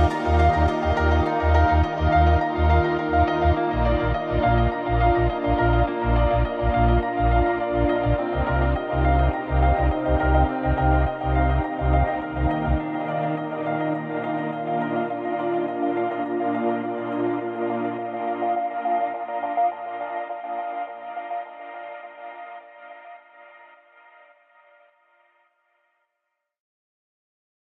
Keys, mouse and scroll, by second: 1.2 click, 1.2 KP_Enter, 1.9-2.2 scroll down 1, 2.4 middle drag, 2.7 scroll up 1, 4.3-10.6 drag, 10.8 click, 11.8 KP_Enter, 12.8 click, 14.0 click, 14.6 KP_Enter, 15.2 scroll down 1, 15.6 alt+a, 15.7 scroll down 2, 15.9-16.6 middle drag, 16.6 scroll up 2, 16.8 scroll down 2, 16.9-19.4 middle drag, 19.4-19.9 scroll down 2, 19.9-20.7 scroll up 2, 20.7-21.2 scroll down 2, 21.2-21.9 middle drag, 21.9-22.3 scroll up 2, 22.3-24.6 middle drag, 24.6 scroll up 2, 24.7 scroll down 2, 24.9-27.6 middle drag.